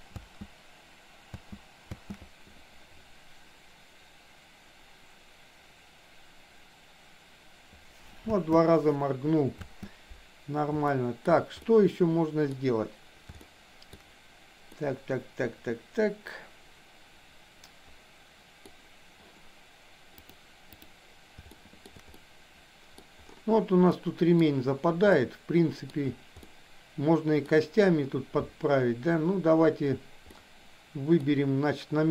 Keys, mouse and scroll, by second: 0.1 space, 8.1 click, 9.6 space, 10.9 shift+middle click, 11.6 middle click, 13.4 shift+middle click, 14.6-18.6 middle drag, 20.1 click, 21.5 shift+middle click, 22.1-22.9 middle drag, 24.0-24.4 middle drag, 25.1-25.9 middle drag, 26.5-27.4 middle drag, 30.4 middle click.